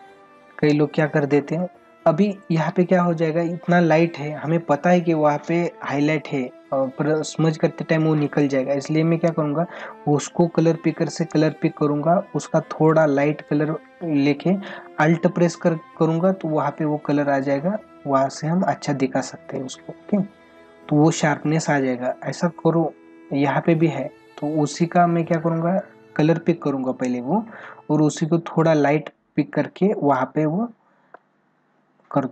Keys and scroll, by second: 2.5 ctrl+alt+z.